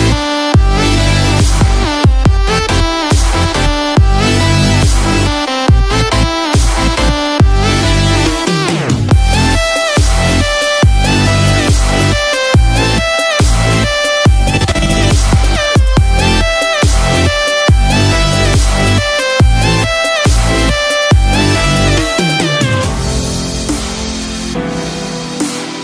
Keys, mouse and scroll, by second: 1.9 KP_0, 2.6 space, 14.7 scroll up 1, 15.4-16.2 scroll up 2.